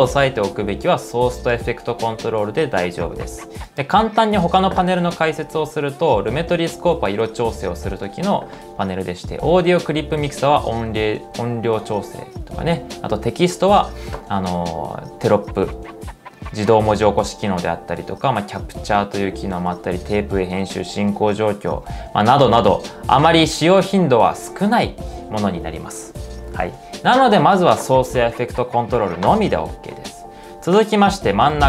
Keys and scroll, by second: 7.0-7.8 typing, 31.4-31.6 typing.